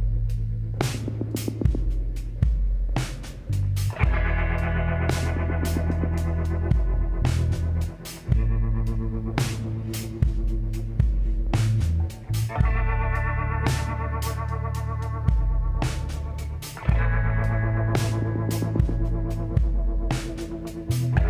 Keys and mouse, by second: 4.3-6.2 drag, 5.4 l, 6.2 middle click, 6.5 KP_1, 7.8 shift+d, 11.7 g, 16.3-17.4 middle drag, 17.4 shift+d, 18.8-20.4 drag.